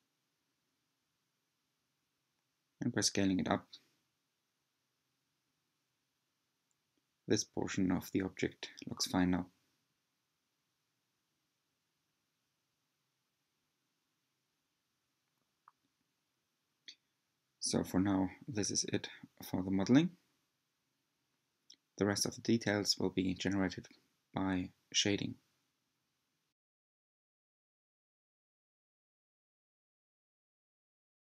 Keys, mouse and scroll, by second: 3.6 r, 8.1 s, 11.8 Tab, 12.4-13.3 scroll down 6, 13.4-14.0 shift+middle drag, 14.0-14.4 shift+scroll down 3, 14.8 Tab, 15.4-16.7 scroll down 2, 16.7-17.4 scroll up 1, 17.4 shift+middle click, 18.3 scroll up 1, 18.4-20.4 middle drag, 20.4 Tab, 21.0-22.0 scroll down 1, 22.0-23.1 middle drag, 30.2 click.